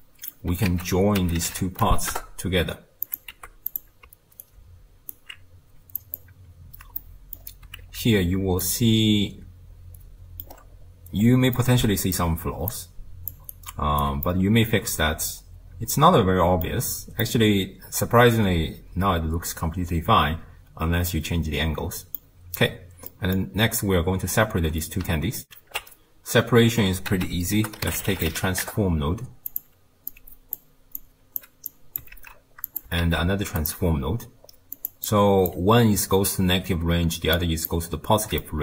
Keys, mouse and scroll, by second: 0.7 ctrl+a, 3.3 g, 4.4-6.2 alt+right drag, 6.2 click, 7.0-8.0 middle drag, 8.0 ctrl+x, 8.7-10.5 middle drag, 10.5 scroll up 1, 11.2-11.6 scroll up 1, 11.6-12.3 middle drag, 12.3 d, 12.7 click, 13.3 d, 13.4 d, 13.5 right click, 14.0 d, 14.3-16.9 middle drag, 16.9-17.2 scroll down 1, 17.2-20.2 middle drag, 23.1-25.5 middle drag, 25.5 ctrl+alt+shift+q, 27.1 ctrl+a, 30.1 drag, 31.0 click, 31.7 drag, 32.2 ctrl+x, 32.7 click, 33.0 shift+d, 34.8 click, 35.1 click, 37.4 click, 38.4 middle click.